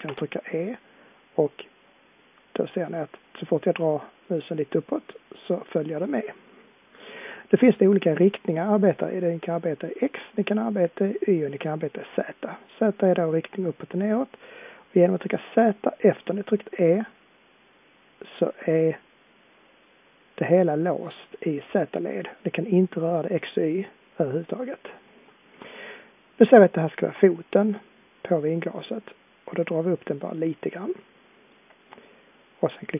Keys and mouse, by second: 0.0 e.